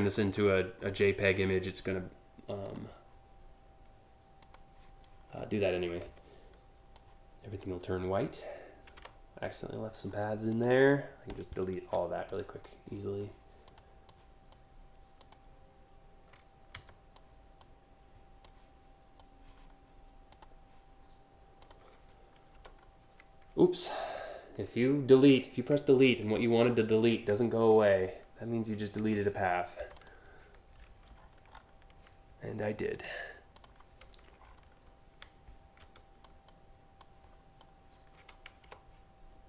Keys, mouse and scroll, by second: 0.5 alt+scroll down 2, 1.1 scroll up 2, 2.3 click, 4.0 click, 6.6 click, 8.6 Delete, 9.7 scroll up 1, 10.1 click, 11.9 click, 11.9 m, 13.2 click, 13.7-14.1 drag, 14.8 click, 16.4 m, 16.8 click, 18.1 click, 19.9 click, 21.3 click, 22.8 Delete, 29.6 click, 29.9 a, 30.8-31.6 scroll up 7, 32.5 click, 33.2 click, 34.0 alt+scroll down 1, 35.9 click, 36.1 m, 36.6 click, 39.2 click.